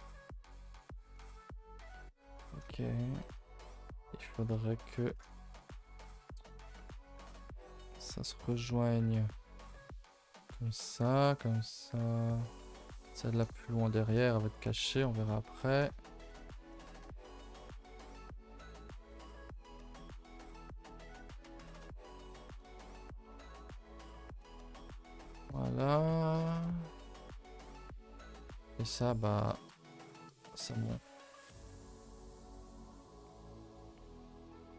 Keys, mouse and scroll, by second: 1.0 click, 6.5 click, 9.0 click, 17.1 middle click, 17.5-18.1 scroll up 10, 17.8 shift+middle click, 18.3 shift+middle click, 18.8-19.4 scroll up 6, 19.1 shift+middle click, 19.4 1, 19.7 click, 20.0 g, 21.1 click, 21.4 g, 21.9 click, 22.2 middle click, 23.2 middle click, 23.5 g, 24.5 KP_0, 28.0 click.